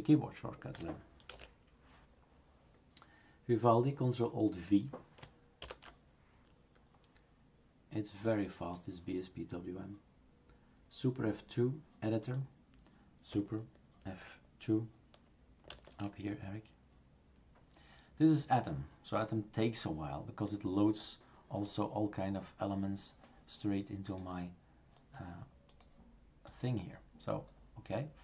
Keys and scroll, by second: 1.3 shift+super+q, 5.6 ctrl+alt+v, 15.7 super+F2.